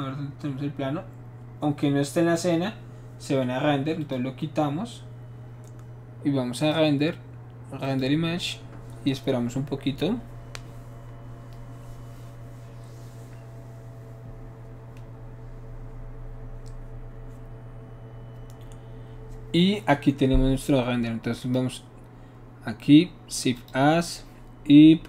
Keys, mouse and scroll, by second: 4.0 click, 6.6 click, 7.8 click, 21.4 click, 23.5 click.